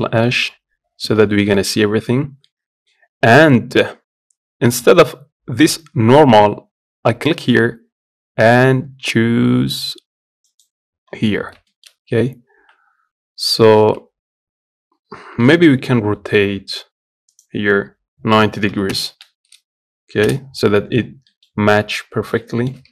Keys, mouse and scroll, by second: 0.0 middle click, 0.5-0.9 scroll up 1, 0.9 z, 1.3-7.2 shift+middle drag, 7.2-12.3 drag, 12.3 a, 13.1 scroll up 2, 15.2 r, 20.7 scroll down 1, 21.0 middle click, 21.2 scroll up 1, 21.4 Tab, 22.1 shift+middle click, 22.6 Tab.